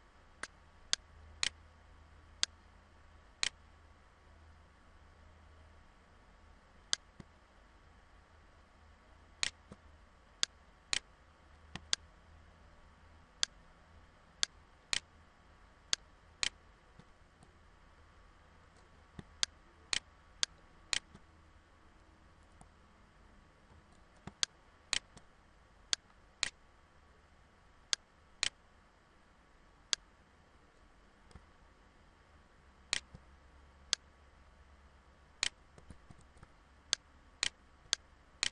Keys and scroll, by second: 16.9 ctrl+=, 17.7 ctrl+=, 23.1 ctrl+=, 24.0 ctrl+=, 35.5 ctrl+z.